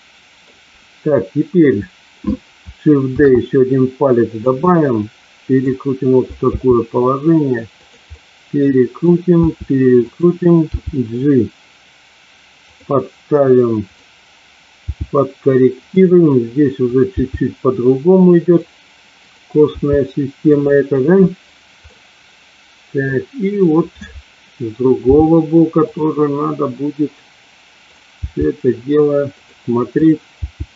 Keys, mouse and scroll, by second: 3.1 shift+d, 4.2 click, 4.7 middle click, 6.4 r, 7.7 click, 8.2 middle click, 9.9 click, 10.7 g, 12.6 click, 13.7 click, 14.7 g, 15.7 click, 16.8 click, 17.1 g, 18.3 click, 19.2 click, 20.4 click, 20.4 g, 21.8-23.1 middle drag, 25.1 g, 25.8 click, 28.2 g, 29.3 click, 29.9 click, 30.3 g.